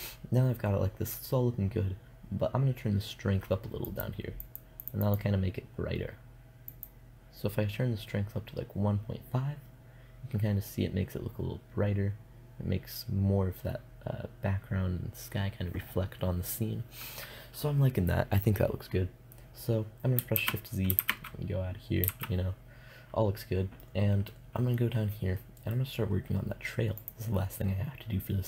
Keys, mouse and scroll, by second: 19.8 shift+z, 20.4 shift+z, 21.6 shift+z, 26.4 middle click.